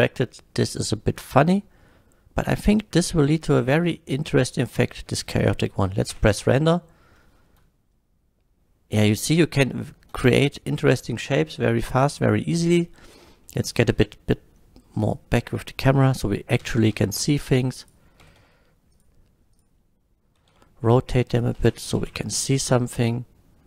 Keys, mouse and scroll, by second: 0.3-0.6 scroll down 1, 0.6 middle click, 3.9-4.4 middle drag, 5.1 space, 5.4 middle drag, 6.1 F12, 12.1 click, 13.1 click, 13.5 middle click, 14.0 KP_0, 15.0 click, 15.0 KP_0, 16.6 g, 16.8 z, 17.0 z, 17.8 click, 18.3 g, 18.4 z, 19.0 click, 19.0 g, 19.5 click, 20.4 r, 20.5 z, 21.0 r, 21.4 click, 22.0 shift+Left.